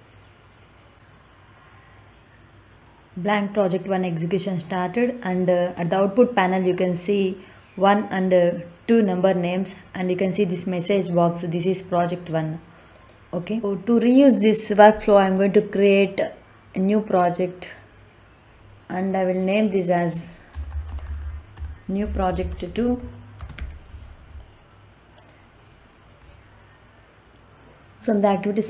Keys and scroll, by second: 20.4 BackSpace, 22.2-23.4 typing.